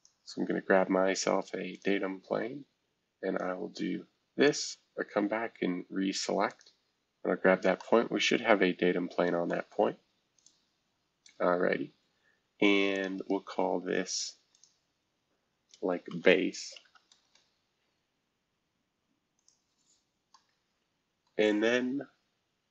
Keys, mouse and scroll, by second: 1.7 click, 3.4 click, 4.4 click, 6.5 click, 7.3-7.8 scroll down 1, 9.5 middle click, 10.3 click, 11.5 scroll down 1, 12.9-16.1 drag, 15.8-17.3 typing, 18.7-19.3 scroll down 1, 19.3 scroll down 1, 19.3 click, 20.3-22.7 middle drag, 20.3-21.3 scroll up 1.